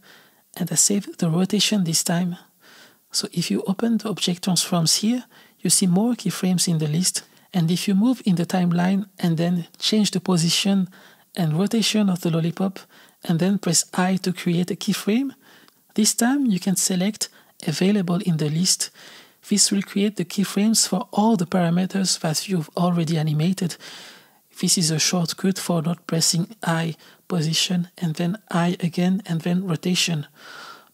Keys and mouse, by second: 4.3 click, 7.4 click, 8.0 shift+d, 8.9 click, 9.7 g, 11.2 r, 14.4 i, 20.2 i, 21.2 click, 22.5-24.7 drag, 24.6 r, 26.3 g, 30.4 i.